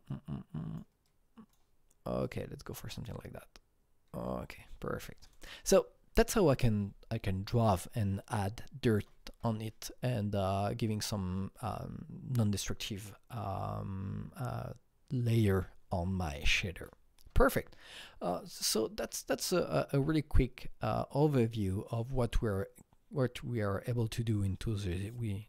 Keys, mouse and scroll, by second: 0.1-2.9 drag, 2.9-5.2 drag, 5.2-6.7 drag, 8.9 click.